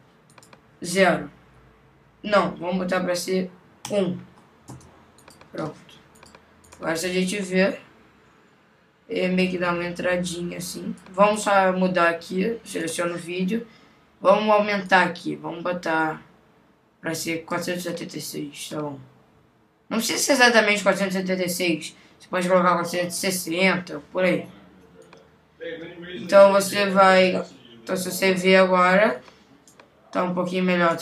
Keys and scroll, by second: 4.7 Return.